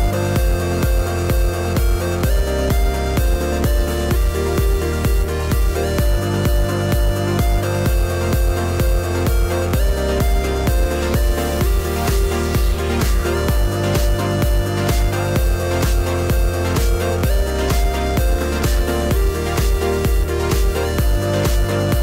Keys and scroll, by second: 1.7 2, 1.9 0, 2.1 2, 2.4 1.